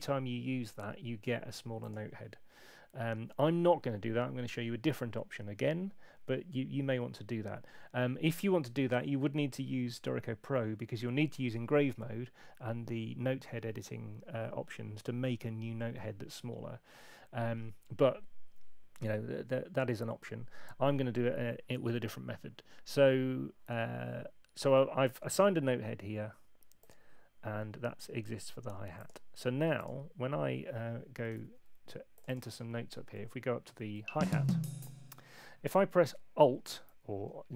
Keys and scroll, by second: 31.3 super+2, 33.9 Up.